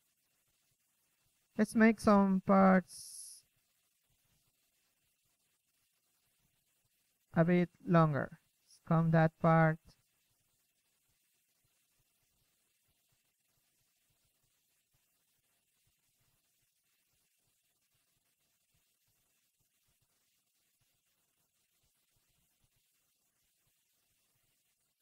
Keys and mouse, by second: 0.0 Escape, 0.3 KP_3, 2.9 F11, 3.5 KP_3, 3.8 z, 4.2 z, 6.6 click, 9.6 f, 18.1-25.0 drag, 24.0 f.